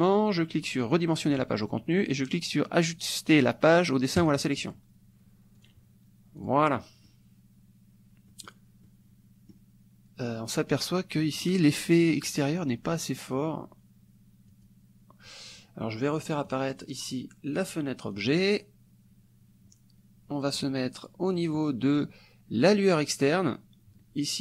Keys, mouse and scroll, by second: 0.9 click, 4.2 click, 5.7 click, 6.4 click, 6.8 middle click, 8.5 middle click, 8.9 click, 11.2 click, 12.0 click, 14.5 click, 16.5 click, 18.1 click, 20.6 click, 21.4 click, 22.7 click.